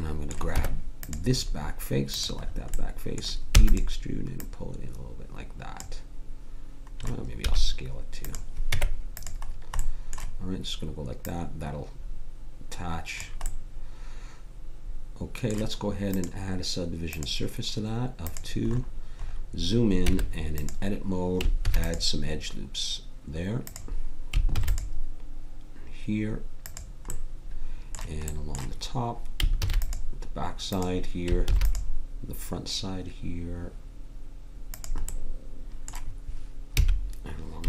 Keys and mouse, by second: 0.5 Tab, 3.5 e, 4.4-6.6 drag, 7.4 s, 8.7 Tab, 11.2-13.1 drag, 16.1-18.3 drag, 18.7 click, 19.3 click, 20.0 Tab, 21.6 ctrl+r, 24.5 ctrl+r, 29.5 ctrl+r, 30.7-35.1 middle drag, 31.4 ctrl+r, 36.7 a.